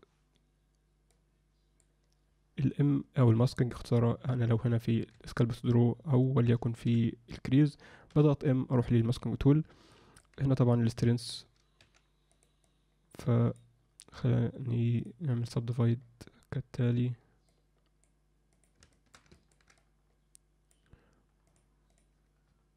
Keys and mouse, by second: 1.3 click, 5.1 1, 6.9 4, 8.1 m, 9.9 alt+middle click, 10.9 click, 11.8 f, 12.6 click, 15.0 click, 17.5 click, 18.5 click, 18.9 shift+middle click, 19.3 ctrl+middle click, 19.7-20.7 drag, 21.7 click, 21.9-22.7 drag.